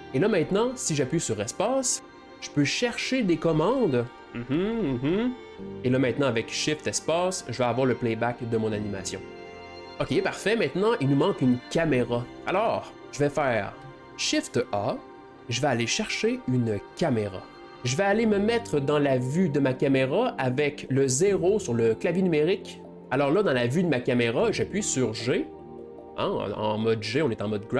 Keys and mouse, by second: 2.0 space, 4.2 BackSpace, 4.8 BackSpace, 5.1 BackSpace, 5.5 shift+space, 13.5 click, 13.8 shift+a, 17.6-20.5 middle drag, 22.8 g, 25.6 g.